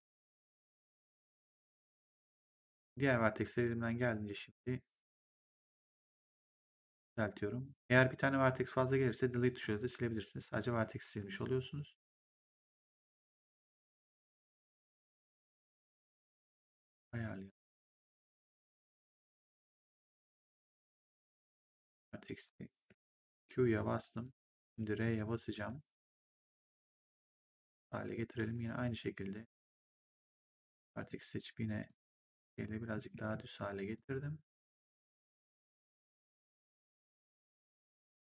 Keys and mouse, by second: 2.2 click, 5.3 click, 8.6 click, 12.7 click, 15.4 click, 18.0 click, 21.4 shift+click, 22.8 q, 24.1 shift+click, 25.4 r, 26.5 click, 28.7 click, 29.8 shift+click, 30.9 shift+click, 33.1 w, 33.9 click, 35.3 click.